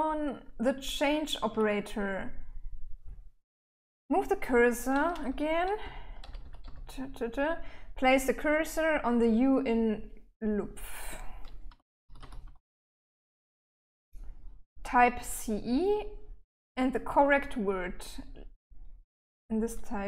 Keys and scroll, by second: 0.0-0.9 typing, 5.2 k, 5.6 k, 5.8 k, 6.0 k, 11.1-13.1 typing.